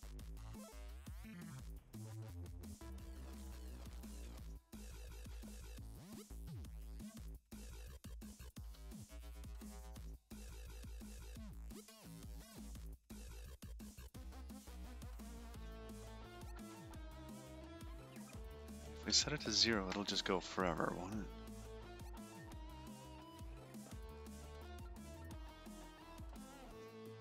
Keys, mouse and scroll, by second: 0.1 middle click, 3.3 click, 4.7 shift+middle click, 7.1 click, 9.9 middle click, 13.5 middle click, 14.6 middle click, 18.5 click, 20.9 middle click, 23.6 middle click.